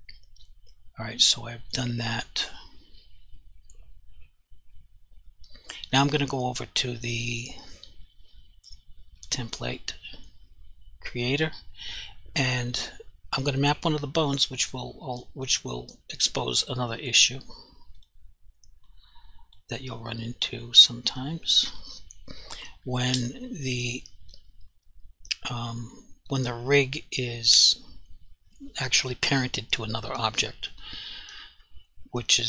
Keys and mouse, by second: 9.2 click, 12.8 click, 14.8 click, 18.0 click, 19.0 click, 20.9 click.